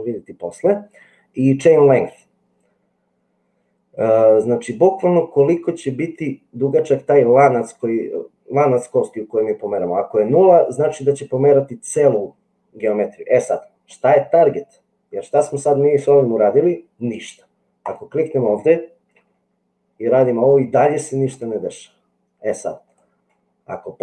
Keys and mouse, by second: 19.2 g.